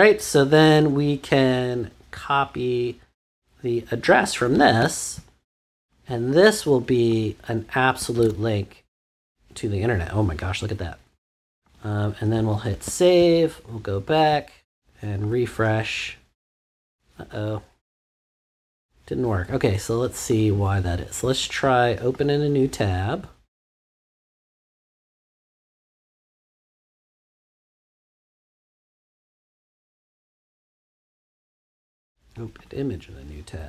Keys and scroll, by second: 8.1 super+v, 12.7 super+s.